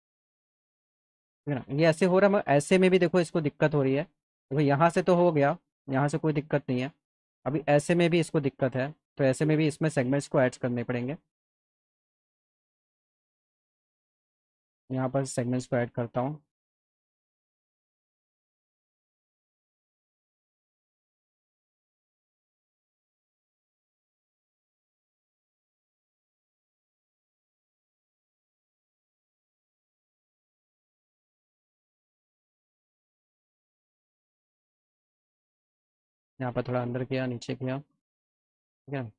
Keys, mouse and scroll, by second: 0.6 alt+middle click, 3.0 middle click, 3.2 middle click, 4.1 alt+middle click, 6.0 alt+middle click, 8.1 scroll up 2, 8.8 click, 12.3 click, 13.6 right click, 14.1 right click, 15.1 click, 15.8 alt+middle click, 17.4-18.6 drag, 20.0 click, 20.9 click, 21.8 alt+middle click, 22.6 middle click, 23.0-24.2 alt+middle drag, 25.1-26.4 drag, 26.9 click, 30.7 click, 31.6 click, 31.8 click, 32.9 click, 35.4 click, 36.3-37.9 alt+middle drag.